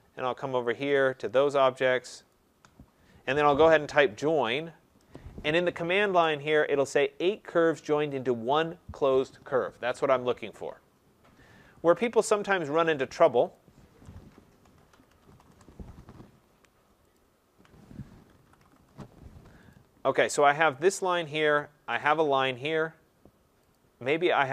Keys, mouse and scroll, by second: 0.9 shift+click, 1.4 shift+click, 2.3 click, 8.6 typing, 12.2 Escape, 13.5 click, 14.0-15.5 typing, 17.1 ctrl+click, 18.0-18.8 typing, 19.7 click, 21.0 click, 22.0 click, 23.7 click.